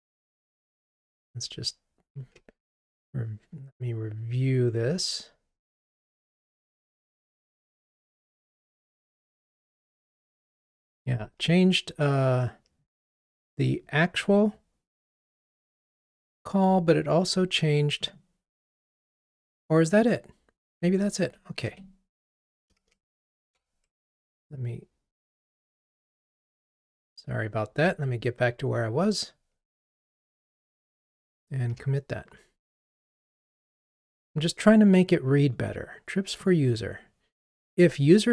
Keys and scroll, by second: 1.5 super+d, 21.7 Escape, 23.2 super+k, 24.0 Escape, 31.7 ctrl+r.